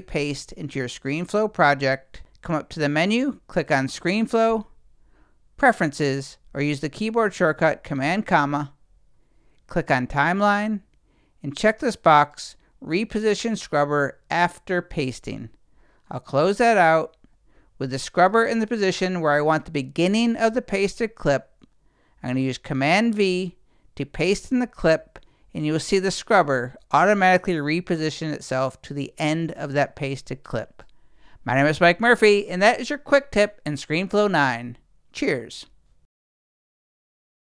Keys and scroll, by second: 24.6 super+v.